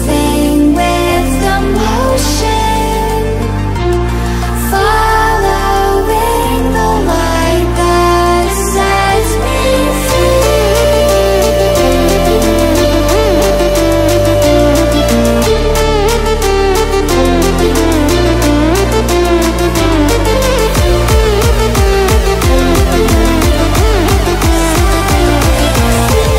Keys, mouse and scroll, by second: 1.7-6.1 drag, 11.2-12.0 typing, 22.0-23.8 drag, 25.9 ctrl+alt+scroll up 1.